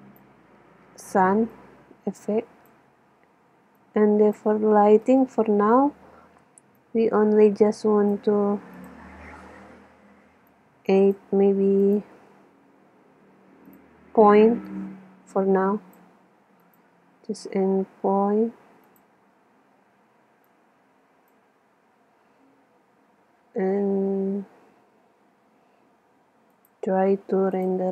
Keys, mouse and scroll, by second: 1.7-3.4 drag, 3.8-6.8 drag, 5.1-5.6 right drag, 6.8-8.4 middle drag, 8.4 click, 8.8-10.5 drag, 10.6-13.5 drag, 13.8-16.5 drag, 16.7-18.3 drag, 18.4 click, 20.7-22.4 drag, 24.0 KP_0, 26.6-27.9 drag.